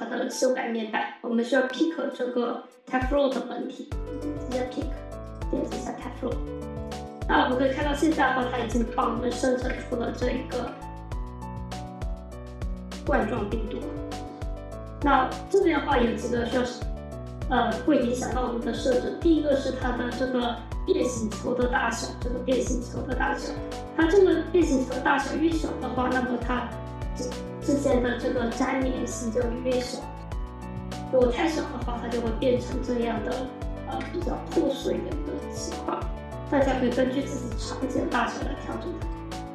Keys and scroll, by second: 8.6 F4, 11.2 F4.